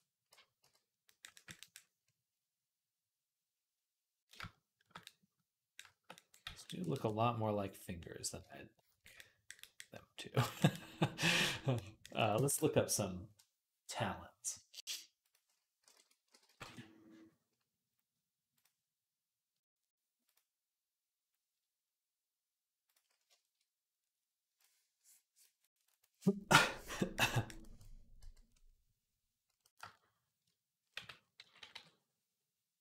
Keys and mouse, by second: 0.4 v, 1.4 v, 6.3 v, 28.0 v, 30.8 v, 31.2 ], 31.4 ], 31.5 ].